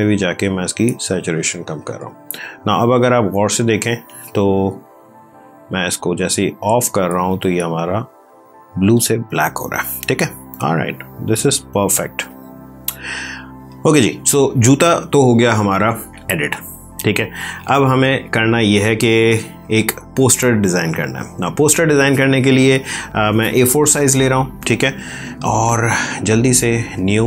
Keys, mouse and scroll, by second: 5.1 click, 9.4 space, 10.0 ctrl+click, 12.2 click, 25.7 click.